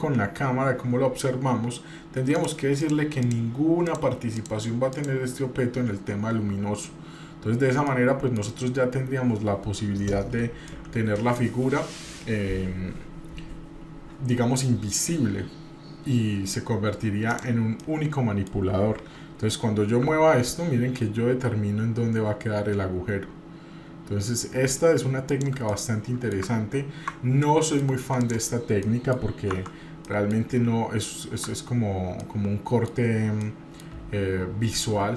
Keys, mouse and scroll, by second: 2.4 click, 2.8 click, 3.2 click, 3.9 click, 4.4 click, 4.9 click, 7.9 middle click, 9.0-9.4 scroll up 1, 10.7-11.4 shift+middle drag, 17.3 click, 17.8 middle click, 20.1 g, 25.7-26.4 middle drag, 27.4-27.8 middle drag, 28.2 click, 28.8 middle click, 29.6 Tab, 30.0 middle click, 30.4 scroll up 1, 31.5 Tab, 32.2-32.9 middle drag, 33.2 scroll down 2, 33.4-33.9 middle drag, 33.9-34.7 scroll up 2, 34.9 scroll down 2.